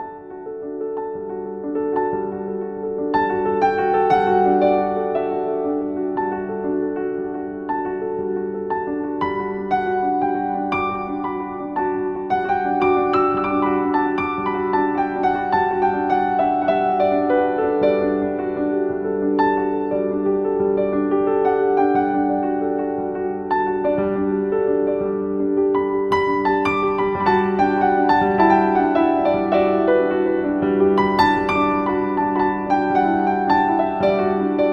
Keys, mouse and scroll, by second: 2.8 scroll up 1, 4.4-12.1 shift+drag, 12.1 z, 13.5-16.7 alt+shift+drag, 17.9-21.0 typing, 18.3 click, 18.9 click, 19.3 click, 19.6 click, 19.9 click, 20.3 click, 21.1-29.3 drag, 30.2 ctrl+alt+2, 30.3 click.